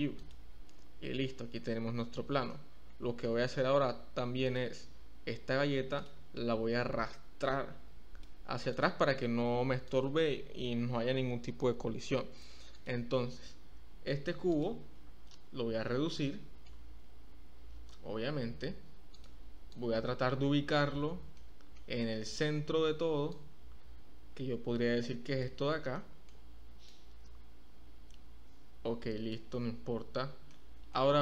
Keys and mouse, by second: 2.6-3.2 middle drag, 4.4 click, 7.1-8.2 drag, 8.6 click, 14.4 click, 16.2-16.6 shift+middle drag, 17.3 s, 19.1 click, 19.7-20.7 drag, 21.3 shift+click, 21.4-21.7 shift+middle drag, 23.3-25.4 drag, 25.9 shift+middle click, 26.1 shift+drag, 26.8-29.3 drag, 30.7 shift+click, 30.8 shift+middle drag.